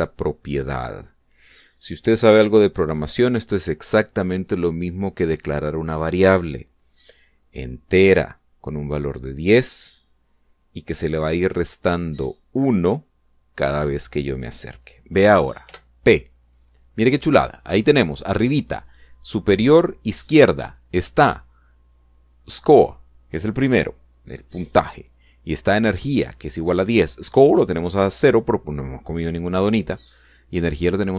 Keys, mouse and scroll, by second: 16.5 p.